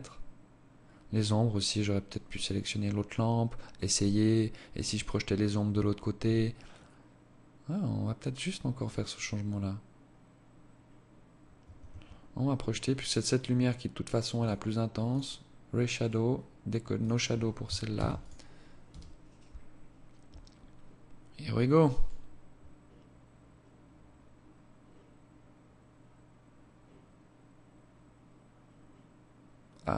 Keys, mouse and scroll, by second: 10.8 Escape, 11.8 right click, 13.2 click, 14.0 click, 14.9 right click, 15.9 click, 16.9 ctrl+s.